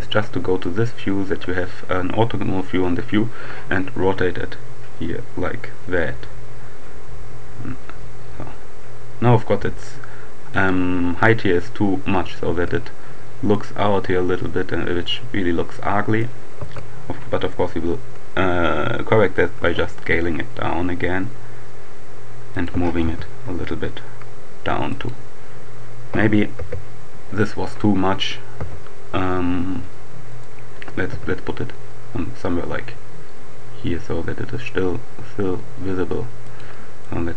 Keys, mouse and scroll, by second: 0.7-1.8 shift+right drag, 3.8 r, 9.8-11.1 right drag, 12.5 Tab, 13.5-14.7 middle drag, 14.7 right click, 14.9 middle click, 15.7-16.7 right drag, 16.6 Tab, 19.4 s, 22.5 click, 22.7 g, 23.1 z, 24.3 click, 26.4 KP_7, 27.5 middle click, 27.5-28.0 scroll down 1, 28.5 g, 30.3 click, 31.1 g, 36.3 click.